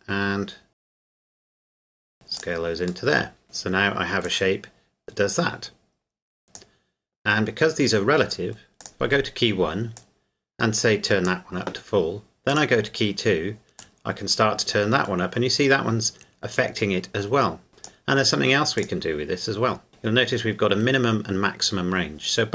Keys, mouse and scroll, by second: 1.1 scroll down 1, 1.3-1.6 scroll up 1, 1.7 scroll down 1, 2.4 click, 3.1 middle click, 3.4 Tab, 4.2 click, 4.5 click, 8.8 click.